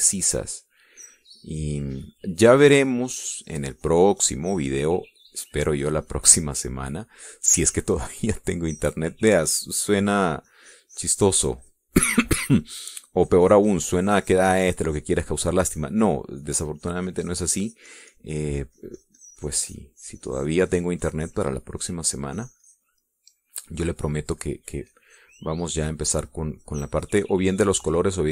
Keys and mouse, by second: 1.6-3.6 drag, 3.9-8.0 drag, 8.6 middle click, 10.5 click, 11.3-13.5 drag, 14.5-16.7 drag, 16.9 middle click, 17.9-23.1 drag, 23.3-24.5 drag, 25.3 middle click, 26.3-28.3 drag.